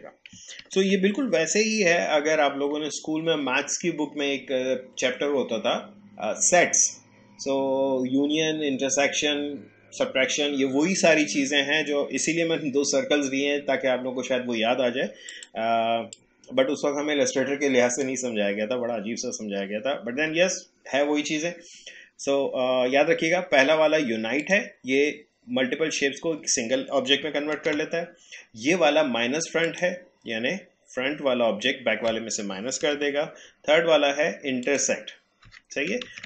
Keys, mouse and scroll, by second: 0.6 ctrl+z, 11.2 click, 15.3-20.6 drag, 24.4 click, 27.2 click, 27.5 ctrl+z, 29.6 click, 32.5 click, 32.8 ctrl+z, 34.6 click, 36.1 ctrl+z.